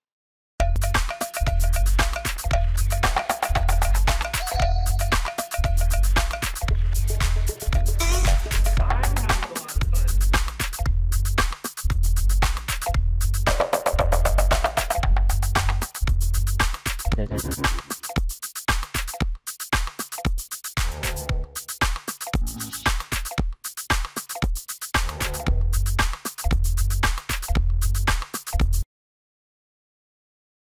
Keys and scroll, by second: 0.3 m, 7.6 shift+space, 11.5 ctrl+shift+s, 14.7 ctrl+space, 14.9 Escape, 20.7 f, 22.5 space, 22.6 Escape, 23.3 space, 23.4 Escape.